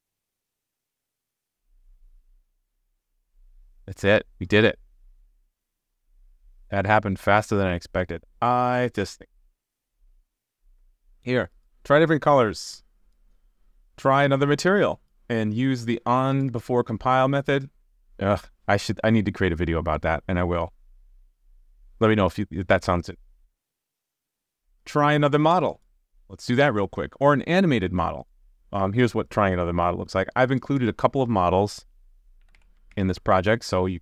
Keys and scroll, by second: 32.9 super+s.